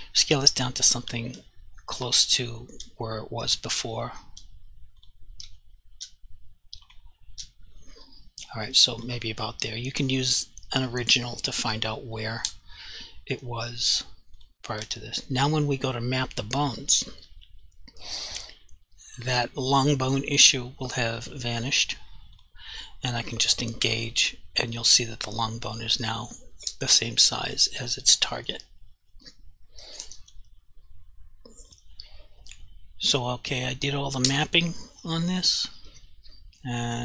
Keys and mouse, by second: 0.2 ., 1.3 s, 2.1 click, 2.7 s, 3.5 click, 3.7 ., 4.3 s, 5.0 click, 5.4 ., 5.9 s, 6.0 g, 6.9 right click, 7.3 s, 9.0 click, 14.4 click, 14.8 Delete, 16.2 click, 19.2 click, 31.7 click.